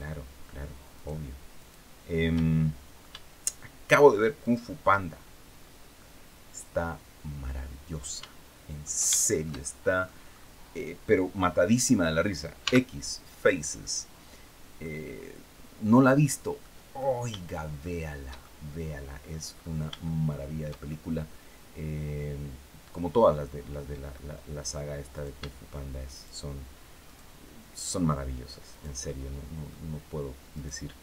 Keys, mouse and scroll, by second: 0.6 shift+right click, 1.2 shift+right click, 2.0 shift+middle click, 4.1 shift+right click, 5.2-5.5 scroll down 2, 5.7-8.7 middle drag, 8.8-9.9 shift+middle drag, 10.0 scroll up 2, 12.3 x, 13.5 click, 14.1-14.4 scroll down 1, 14.5-16.4 middle drag, 16.7 shift+middle click, 17.5-19.2 shift+middle drag, 19.2-19.6 scroll up 1, 19.7 shift+middle click, 20.9-23.9 middle drag, 24.8 shift+right click, 25.8 shift+right click, 26.7 shift+right click, 27.4 shift+right click, 28.4 shift+right click, 28.7 shift+middle click, 30.2 shift+right click.